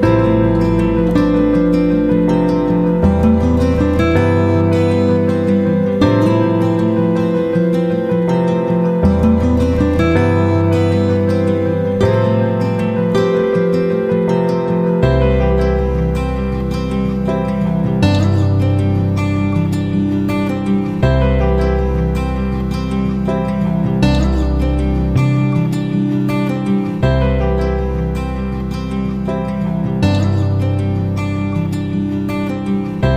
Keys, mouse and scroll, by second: 13.2 F9, 14.4 shift+click, 20.0 shift+click, 22.6 click, 25.7 shift+click.